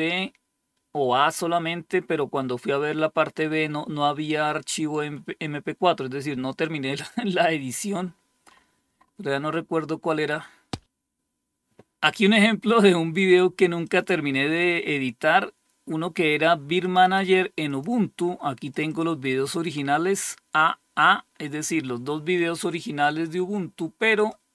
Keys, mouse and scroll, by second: 8.0-9.7 scroll up 2, 9.7-10.6 scroll up 1, 13.3 click, 16.3 click, 16.5 click, 17.1 click, 18.1 click, 23.6 click, 24.4 click.